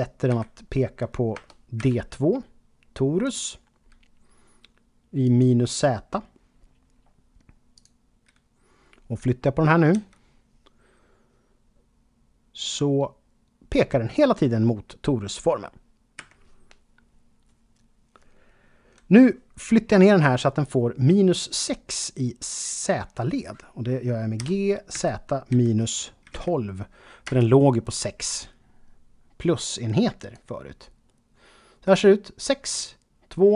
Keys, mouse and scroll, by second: 0.0-1.8 typing, 3.2 click, 5.2 click, 7.7 click, 9.9 g, 16.2 Escape, 24.4 g, 24.9 z, 26.2 typing, 27.2 Return, 30.2 click.